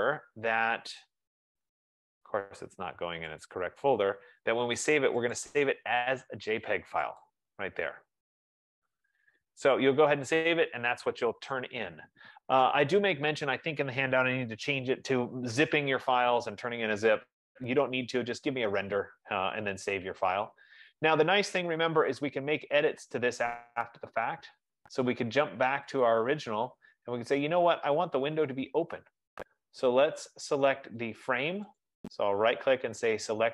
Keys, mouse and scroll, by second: 3.6-5.6 drag, 7.5 click, 10.0 click, 22.1 click, 26.4 click, 31.1 click, 32.2 right click.